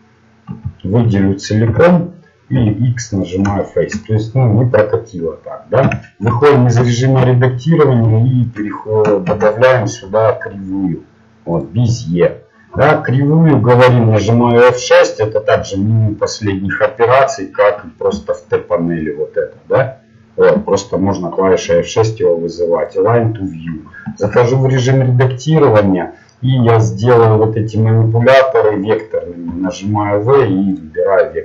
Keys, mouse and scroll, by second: 0.5 a, 1.1 middle click, 1.6 l, 2.2-3.5 middle drag, 3.2 x, 5.8 Tab, 7.2 KP_1, 11.6 shift+a, 12.4 middle click, 18.3 F6, 18.3 t, 20.8 t, 22.8 F6, 24.2 Tab, 30.7 v.